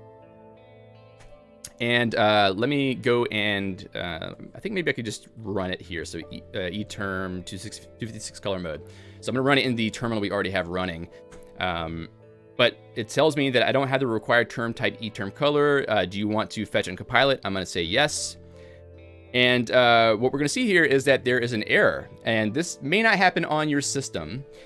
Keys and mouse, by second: 1.2 Escape, 3.4 ctrl+alt+j, 4.5 Return, 5.7 alt+x, 11.6 Return, 18.1 y, 19.7-20.4 typing, 22.5-23.3 typing.